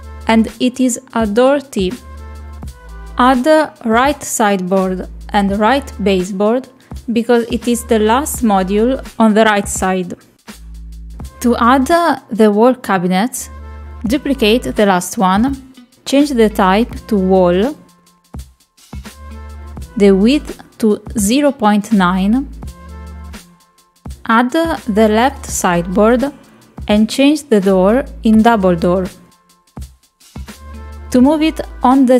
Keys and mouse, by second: 0.0 click, 1.2-2.3 drag, 8.5 click, 14.8 click, 15.9 click, 18.8-19.9 drag, 21.1 click, 24.0-25.4 drag, 29.0-30.7 drag, 31.2 shift+middle click.